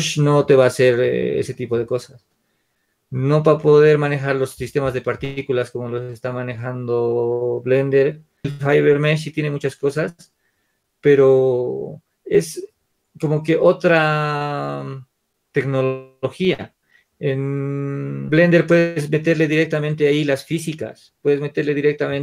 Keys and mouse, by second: 8.8-11.3 drag.